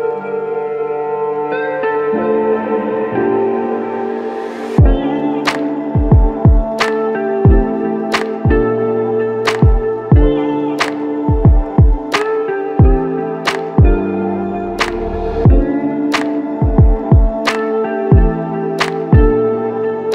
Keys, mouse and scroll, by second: 4.7 alt+click, 8.9 alt+click, 10.5 alt+click, 11.3 f.